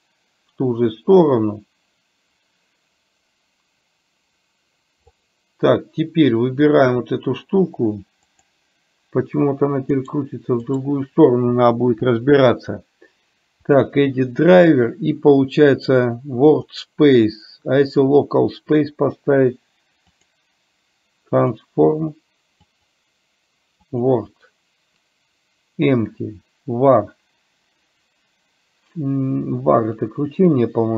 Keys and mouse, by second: 6.8 click, 8.3-10.2 drag, 10.7-30.9 right drag.